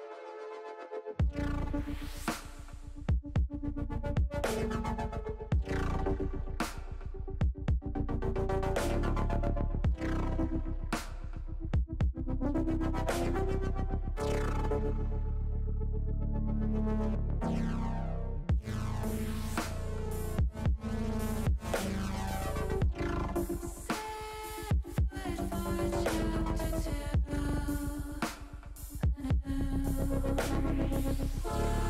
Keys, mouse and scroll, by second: 0.4 click, 2.0 ctrl+shift+b, 3.0 click, 3.3 ctrl+z, 4.0 click, 4.5 click, 5.3 ctrl+b, 6.1 click, 8.3 click, 8.9 click, 10.7 click, 13.1 click, 14.1 click, 16.8 click, 18.4 ctrl+z, 18.8-21.7 drag, 21.9 ctrl+z, 22.3 click, 23.2 ctrl+z, 23.6-30.9 drag, 31.1 ctrl+z.